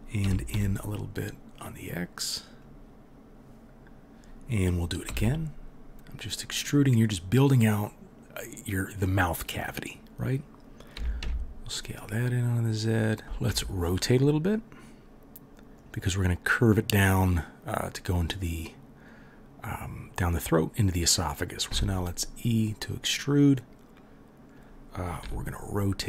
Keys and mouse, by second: 0.2 s, 5.1 e, 10.9 s, 13.4 r, 22.0 e, 25.2 r.